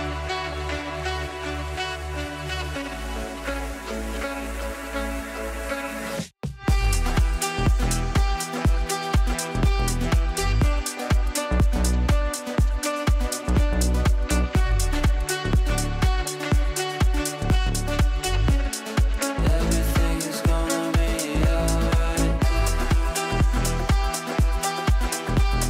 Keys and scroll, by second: 0.5 Delete, 19.6 shift+F2, 20.1 F3, 20.6 g, 23.3 ctrl+z, 25.3 g.